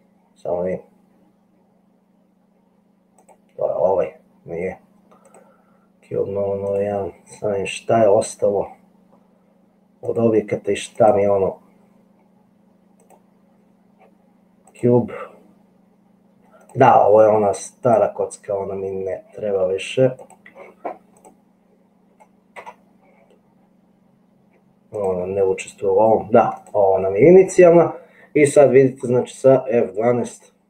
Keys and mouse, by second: 3.2 click, 6.7 click, 11.0 click, 13.1 click, 14.9 click, 22.9 Delete.